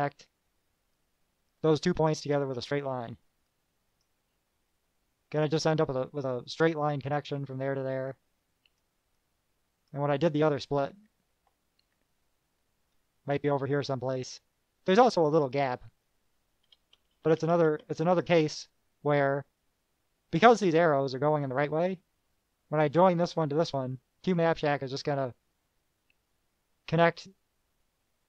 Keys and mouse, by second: 1.1-2.4 drag, 2.4 KP_Add, 3.7 click, 8.3-9.1 drag, 9.3-10.2 drag, 10.9 KP_Subtract, 12.0 KP_Subtract, 14.1-16.4 drag, 16.8 KP_Add.